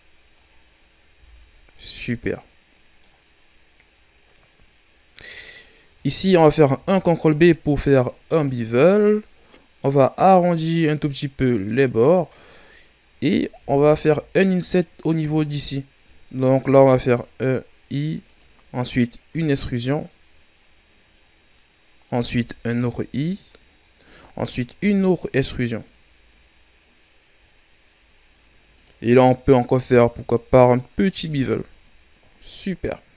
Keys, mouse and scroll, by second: 1.7-3.7 middle drag, 3.7-5.5 drag, 5.5-6.7 scroll up 1, 6.7 ctrl+b, 12.6-13.5 scroll up 1, 13.5 ctrl+Tab, 15.0-16.6 right drag, 16.6 i, 19.3 e, 24.7 e, 29.7 ctrl+b, 31.1 Tab, 31.7-32.5 scroll down 2, 32.5-33.1 scroll down 1.